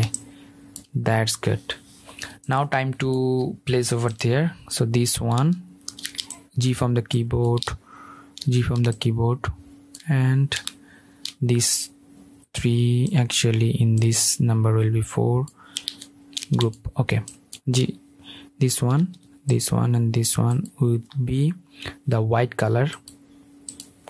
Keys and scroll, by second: 5.6 super+g, 8.3 super+g, 16.2 super+g, 18.6 super+g, 19.8 super+g.